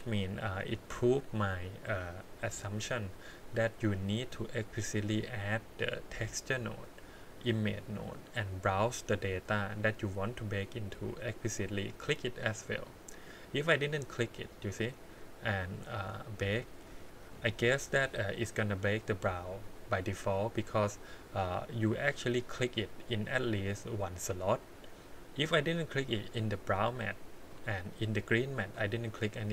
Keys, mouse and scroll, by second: 0.7 click, 4.0 click, 5.0-8.1 drag, 8.5-10.5 drag, 10.9 click, 11.5 click, 14.1 click, 15.6 click, 16.5 click, 24.1 click, 26.6 click, 27.4 click, 28.7 click.